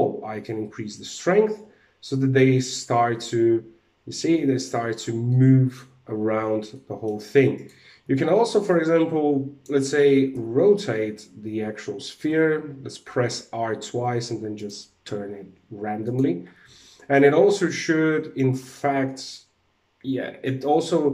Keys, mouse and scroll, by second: 4.9 middle click, 6.3 middle click, 7.1 right click, 7.6 alt+a, 8.2 click, 9.8 r, 15.5 click, 16.0 alt+a.